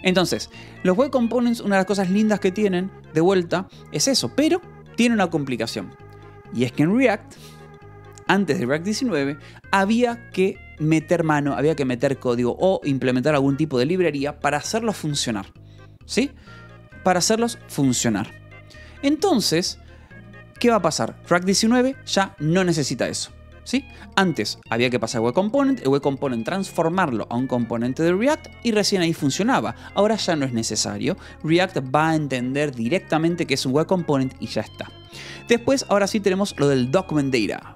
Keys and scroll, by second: 16.5 k, 17.4 shift+v, 19.1 Escape, 19.4 j, 20.6 shift+v, 34.2 Escape, 35.0 j, 35.5 j, 36.5 j.